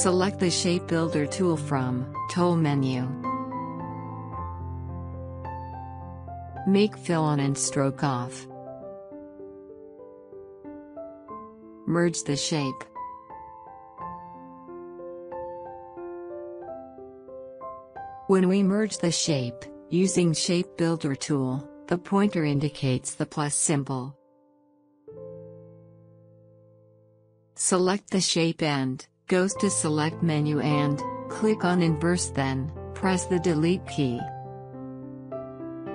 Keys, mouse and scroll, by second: 3.9 click, 6.6-9.5 drag, 11.4-13.5 drag, 13.5 alt+scroll up 1, 14.9-18.2 drag, 19.1-26.6 drag, 29.7 click, 33.5 click.